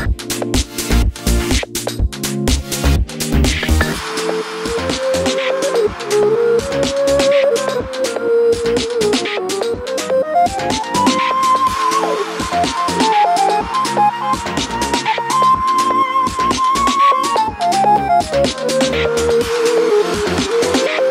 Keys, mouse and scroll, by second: 0.7 click, 1.2 alt+d, 1.6 click, 1.7 r, 3.3 click, 3.3 g, 5.1 click, 5.3 click, 5.6 click, 5.8 g, 8.3-11.3 middle drag, 10.0-10.4 scroll down 2, 11.3 click, 11.9 alt+d, 13.6 click, 13.9 s, 14.9 click, 15.0 r, 16.1 click, 16.9 alt+d, 17.4 click, 17.6 r, 18.3 click, 18.5 g, 19.0 click, 20.3 alt+d, 20.5 click, 20.9 r.